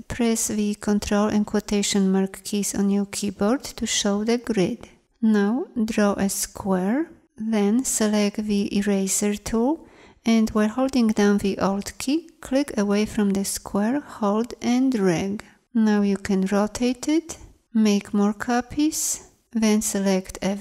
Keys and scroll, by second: 0.8 ctrl+', 5.9 m, 8.7 shift+e, 18.4 ctrl+d, 19.6 v.